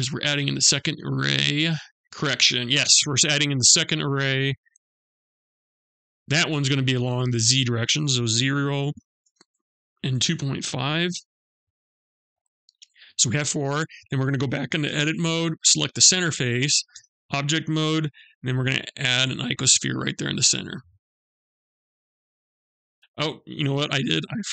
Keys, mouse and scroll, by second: 3.4 click, 4.7 click, 8.7 Tab, 13.2 click, 14.3 Tab, 15.0 click, 16.3 Tab, 17.9 shift+a, 24.2 ctrl+z.